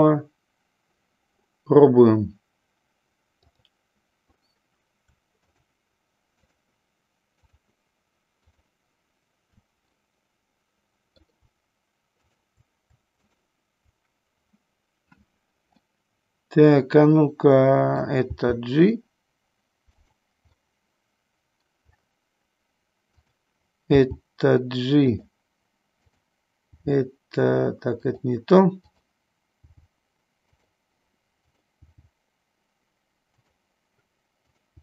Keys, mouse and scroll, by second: 3.5 click, 5.5 shift+click, 6.4 shift+click, 8.6 shift+click, 10.0-11.3 middle drag, 15.9 middle click, 16.8 middle click, 20.0 click, 20.7-21.8 middle drag, 23.2 click, 25.2 click, 26.1 click, 28.0 click, 28.9 click, 30.7 g, 31.5 click, 33.4 click, 34.4 click.